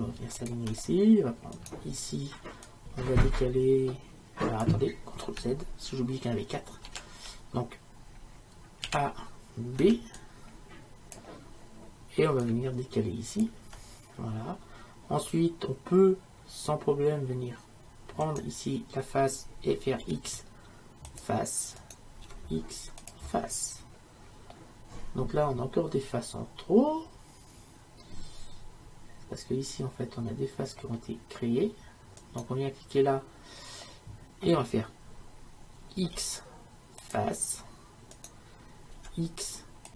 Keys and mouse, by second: 1.6-4.7 right drag, 6.9 ctrl+z, 8.9 a, 13.4-18.3 drag, 18.3-20.2 right drag, 20.1 x, 21.8 right click, 22.3 x, 26.2-29.2 middle drag, 32.2-34.0 right drag, 34.0-36.0 middle drag, 36.0 x, 38.2 right click, 39.0 x.